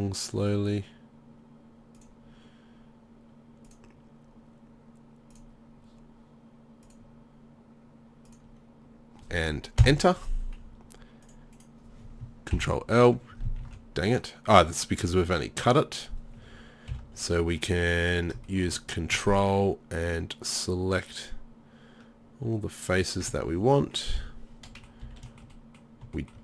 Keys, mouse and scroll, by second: 12.6 ctrl+l, 13.6 ctrl+z, 16.9 KP_7, 25.1 z.